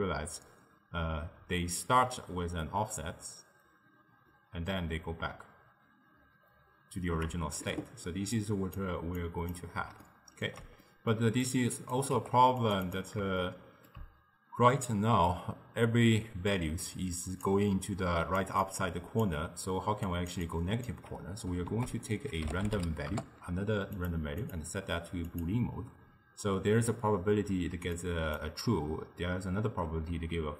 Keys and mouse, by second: 8.4 click, 9.3 click, 10.1-11.5 ctrl+middle drag, 11.5 click, 12.2 g, 12.9 click, 13.4-16.5 shift+middle drag, 16.6-17.9 drag, 17.9-21.0 typing, 18.1 click, 18.7 click, 20.1 click, 20.5 click, 21.8 ctrl+a, 24.5-27.6 drag, 28.0 click.